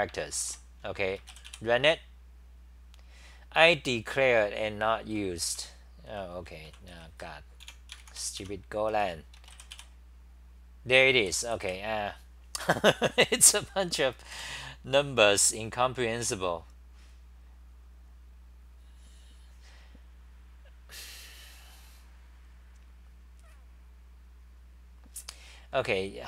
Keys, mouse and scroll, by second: 0.4 ctrl+c, 5.2-7.6 typing, 8.5 Home, 9.8 r, 11.0-11.9 typing, 14.3 super+=.